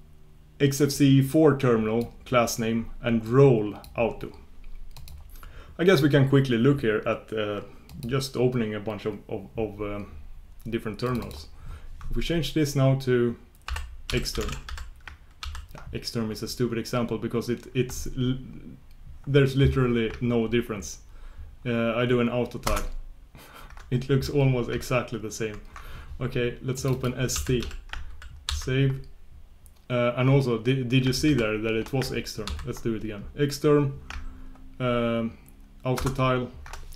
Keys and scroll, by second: 25.4 shift+super+q, 35.9 ctrl+super+Return.